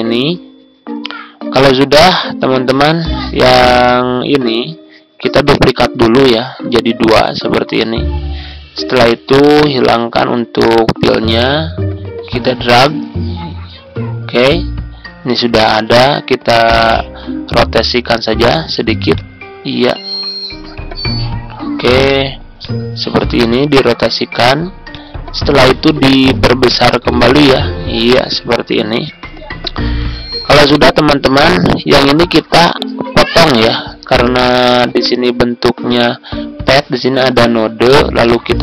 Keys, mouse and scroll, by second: 5.4 ctrl+d, 6.1 click, 7.4 ctrl+z, 9.5 right click, 10.7-15.3 drag, 15.6 Left, 15.7 Left, 18.0-24.3 drag, 26.8-38.6 shift+drag.